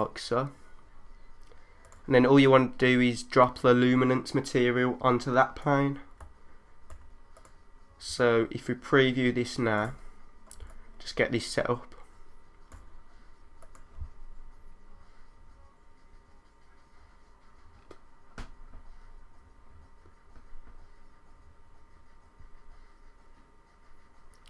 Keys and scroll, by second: 6.2 3, 7.1 3, 9.1 3, 10.6 1.